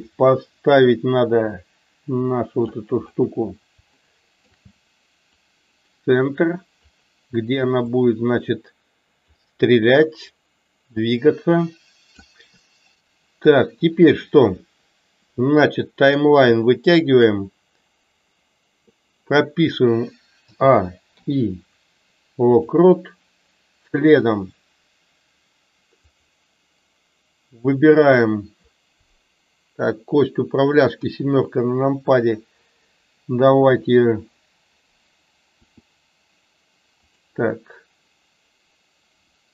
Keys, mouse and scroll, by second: 0.2-2.7 drag, 4.0 shift+middle click, 5.5-6.7 drag, 7.9-9.2 drag, 10.3-12.2 drag, 16.2 click, 26.0 click.